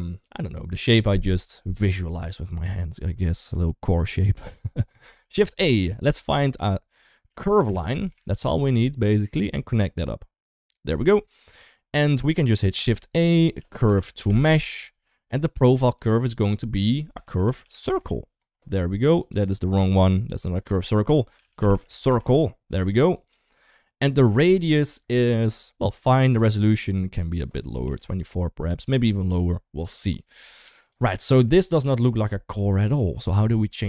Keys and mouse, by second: 4.9 shift+a, 9.5-10.5 drag, 11.0 shift+middle drag, 12.2 shift+a, 15.9-19.1 drag, 19.6 ctrl+x, 20.3-22.7 drag, 22.9 click, 23.5-24.1 drag, 27.1 click, 30.2 g.